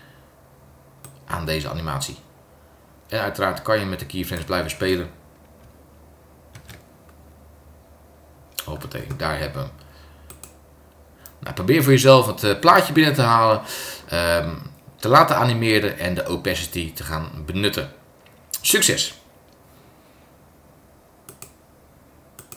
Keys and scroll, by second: 6.5 super+Return.